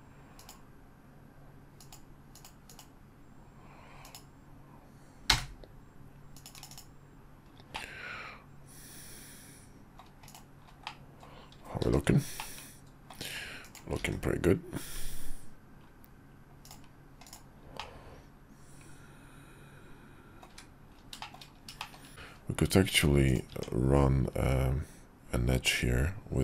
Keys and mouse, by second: 7.7-10.0 middle drag, 10.3-10.6 drag, 10.8-11.2 middle drag, 11.8 shift+2, 12.4-13.1 middle drag, 13.7 click, 14.0 alt+x, 16.6 click, 17.2 click, 17.7-20.4 middle drag, 20.6 `, 21.2 shift+click, 21.8 shift+click, 22.1 Tab, 22.9 Tab, 23.5 Tab.